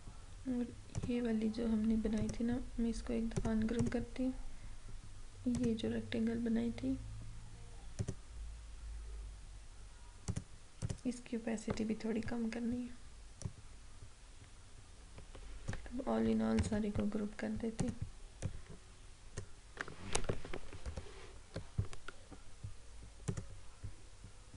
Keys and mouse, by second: 1.0 click, 2.2 right click, 3.4 click, 8.0 click, 10.3 click, 13.5-16.6 drag, 16.6 ctrl+g, 17.8-20.9 drag, 20.9 ctrl+-, 23.3-24.5 drag.